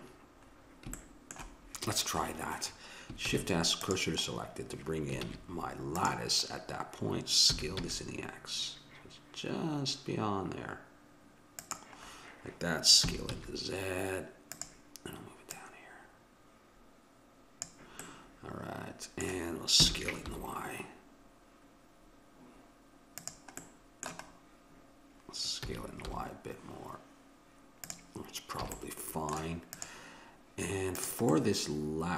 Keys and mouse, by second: 0.5-2.0 middle drag, 3.3 shift+s, 5.3 shift+a, 7.5 s, 13.1 s, 15.5-17.4 drag, 18.0-19.8 middle drag, 19.8 s, 23.7-25.7 middle drag, 25.7 s, 28.7 a, 28.8 middle click, 29.8-32.1 drag.